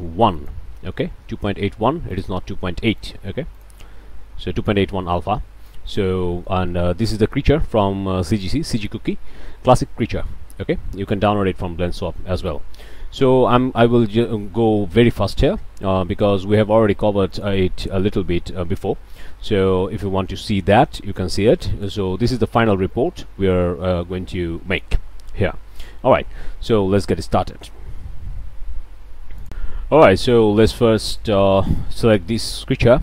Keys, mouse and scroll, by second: 0.4 click, 2.1 click, 3.0 click, 3.5 click, 5.9-6.2 drag, 6.3 click, 6.8 shift+drag, 7.8 click, 10.0 click, 10.6 scroll up 1, 10.9 click, 11.3 scroll down 2, 11.8 shift+middle click, 12.5 shift+middle click, 17.3 middle click, 21.7 click, 26.5 shift+click, 27.1 shift+click, 28.1 ctrl+s, 30.3-30.6 shift+middle drag, 31.2 shift+click, 31.7 shift+middle click.